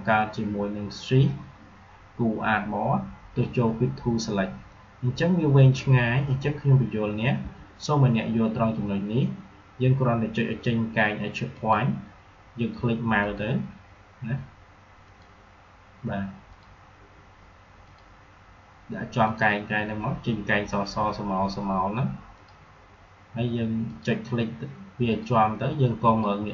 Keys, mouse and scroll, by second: 9.3 shift+Num_Lock, 11.5 alt+shift+click.